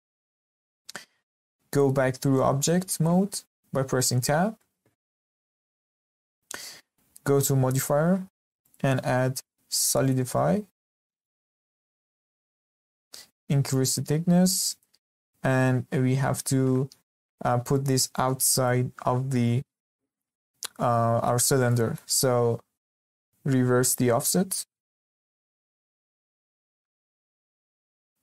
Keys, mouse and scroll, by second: 0.2-0.6 scroll down 2, 0.6-4.0 middle drag, 4.0 Tab, 4.5-5.3 middle drag, 5.3-5.6 scroll up 1, 5.6-8.6 shift+middle drag, 8.6-11.2 drag, 11.2-12.2 middle drag, 12.2-12.5 scroll up 2, 12.5-13.7 shift+middle drag, 13.7-16.7 drag, 21.7-23.9 middle drag, 23.9-26.2 drag, 26.2-26.5 scroll down 4, 26.5-28.0 shift+middle drag, 28.0 scroll up 1.